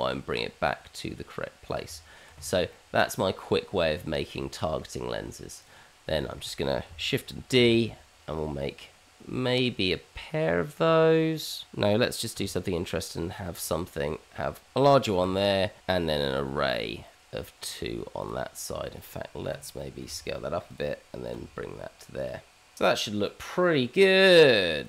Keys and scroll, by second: 1.8 Tab, 4.3 Tab, 7.5 shift+d, 12.2 s, 15.2 g, 15.8 q, 20.0 s, 21.3 g.